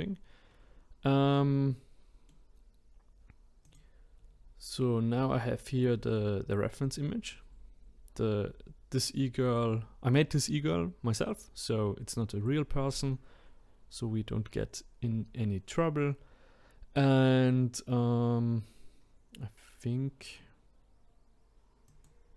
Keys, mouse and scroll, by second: 0.0 scroll down 2, 0.5-1.3 scroll up 1, 1.3-3.6 middle drag, 3.6 click, 4.1-5.2 scroll up 12, 6.7-7.4 scroll up 2, 7.4-8.9 scroll down 1, 14.6 scroll down 2, 21.9-22.3 drag.